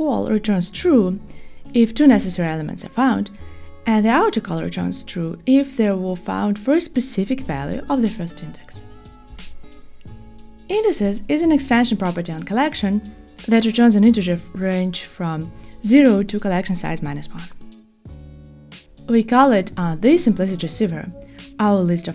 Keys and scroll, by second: 12.4 super+b.